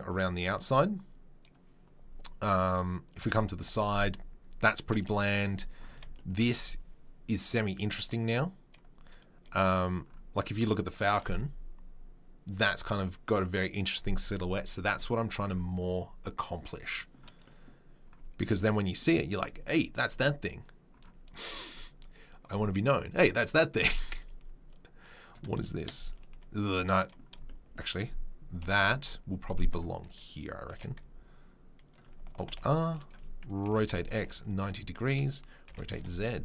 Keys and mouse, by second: 3.2 KP_3, 5.1 KP_1, 5.9-6.4 shift+right drag, 6.4-25.3 drag, 25.3-36.4 shift+middle drag, 28.6 KP_3, 28.9 KP_1, 30.7 g, 32.5 alt+r, 33.6 r, 35.7 r.